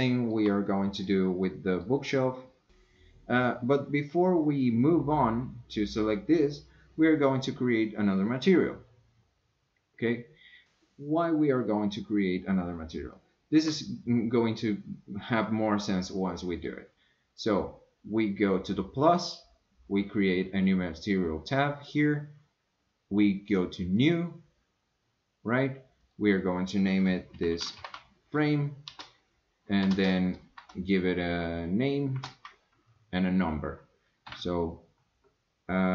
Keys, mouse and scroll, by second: 0.2 shift+middle click, 0.7 middle click, 1.4 scroll down 1, 1.6 middle click, 2.1 scroll down 1, 2.3 middle click, 13.1 shift+scroll down 1, 13.2 shift+middle click, 14.5-14.8 scroll down 2, 14.8-16.6 middle drag, 19.3 click, 24.0 click, 26.1-35.9 drag.